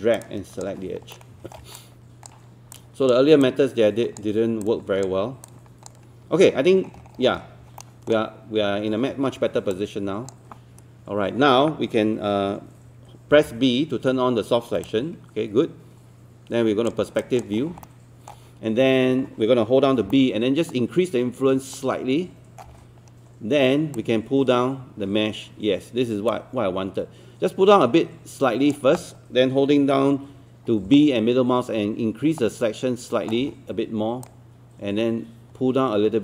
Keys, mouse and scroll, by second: 1.1 alt+middle click, 1.8 shift+click, 2.7 shift+click, 3.5 shift+click, 4.7 shift+click, 5.5 shift+click, 6.7 scroll down 1, 7.8 alt+middle click, 8.7-9.3 scroll up 1, 13.3 b, 14.9-17.0 drag, 17.2 alt+click, 17.6 scroll up 1, 17.8 alt+middle click, 20.0-20.9 typing, 20.1 middle click, 22.5-23.2 typing, 24.0-29.7 drag, 30.8-31.6 typing, 31.0 middle click, 33.7 typing, 34.3-36.2 drag.